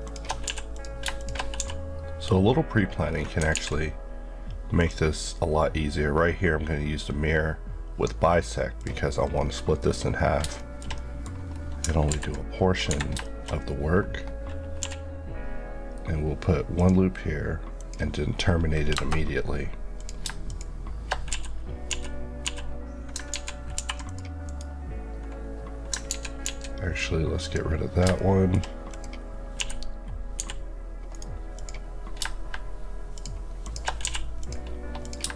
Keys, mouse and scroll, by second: 0.0 shift+Left, 0.4 f, 0.7 click, 1.6 f, 3.1 scroll down 1, 3.5 alt+x, 4.8 click, 9.3 scroll up 1, 10.5 middle click, 11.0 middle click, 11.5 scroll down 1, 12.1 ctrl+r, 12.9 Escape, 13.2 shift+middle click, 13.5 scroll up 1, 14.9 k, 16.7 click, 18.9 KP_Enter, 20.0 click, 21.3 f, 22.4 typing, 23.3 ctrl+z, 23.7 ctrl+r, 24.1 click, 24.5 right click, 26.1 ctrl+z, 27.4 click, 28.2 shift+middle click, 28.9 click, 29.6-30.4 typing, 31.1 right click, 31.6 click, 33.1 shift+click, 33.6 shift+Left, 34.0 f, 34.4 click.